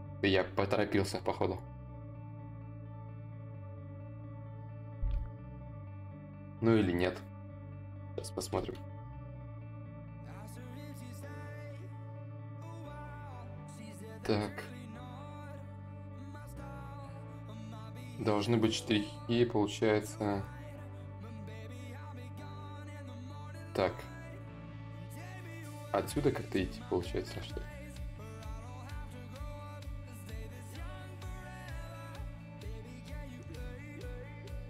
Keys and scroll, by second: 8.1 b, 8.8 s, 13.8 s, 15.4 ctrl+z, 15.4 y, 16.3 s, 27.0 s, 28.6 ctrl+z, 34.4 s.